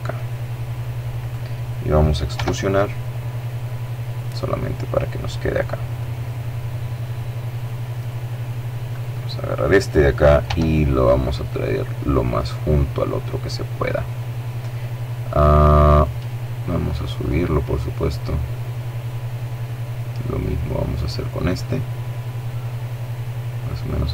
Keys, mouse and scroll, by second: 0.0 right click, 1.1 e, 2.9 click, 4.8-7.4 right drag, 6.8 middle click, 7.7 right click, 9.3 g, 11.0 click, 13.6-14.6 middle drag, 14.8 right click, 16.1-17.9 drag, 19.7 right click, 20.3-22.0 drag, 23.1-24.1 right drag.